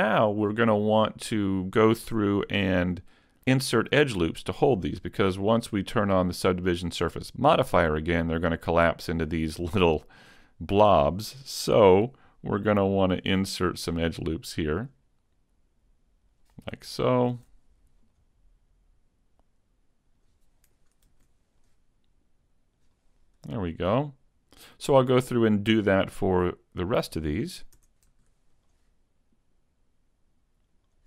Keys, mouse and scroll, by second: 0.2 scroll up 2, 2.1 Tab, 2.7 middle click, 7.7 click, 8.2 middle click, 11.6-13.3 scroll up 2, 13.3 ctrl+r, 16.5 click, 17.4 ctrl+r, 20.2 click, 21.1 ctrl+r, 22.8 a, 23.1 Tab, 23.2-23.5 scroll down 4, 23.7 middle click, 25.2-25.9 scroll up 3, 27.0 right click, 27.8 Tab, 28.1 middle click, 29.5 ctrl+r.